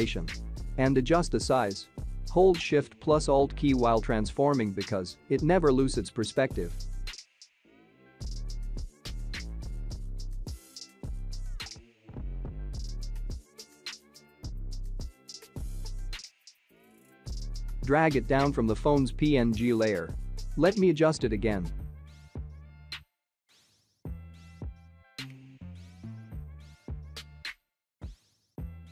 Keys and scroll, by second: 22.0 ctrl+t.